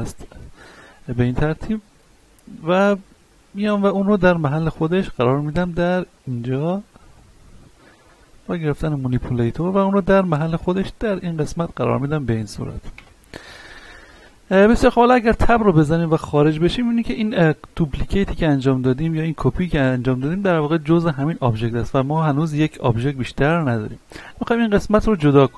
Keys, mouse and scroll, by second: 0.6-0.9 scroll up 1, 1.5 shift+middle click, 2.3 scroll up 1, 2.6 shift+middle click, 3.1-3.7 scroll up 1, 4.7 shift+middle click, 5.5 click, 8.2 shift+middle click, 8.6 scroll up 1, 9.7-11.5 drag, 11.5-11.9 scroll down 1, 12.2 middle click, 13.3-13.8 scroll down 1, 13.8 middle click, 14.1-14.8 scroll down 1, 15.5 Tab, 16.1 shift+middle click, 16.5-17.1 scroll up 1, 17.1 right click, 17.8-19.5 middle drag, 19.5-21.3 scroll up 1, 24.2 Tab, 25.1-25.5 scroll down 1.